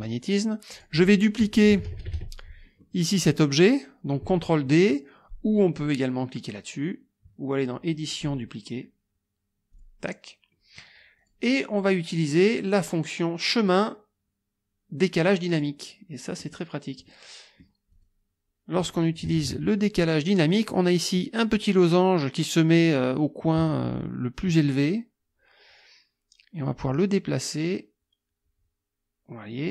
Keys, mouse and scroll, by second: 0.7 click, 1.7 KP_Subtract, 2.8 middle click, 8.1 click, 9.7 click, 11.2 click, 12.8 click, 15.5 click, 16.4-16.7 scroll up 1, 17.1-17.4 scroll up 1, 17.4 click, 17.9 click, 19.2 KP_Subtract, 20.2 middle click, 26.7-29.7 drag.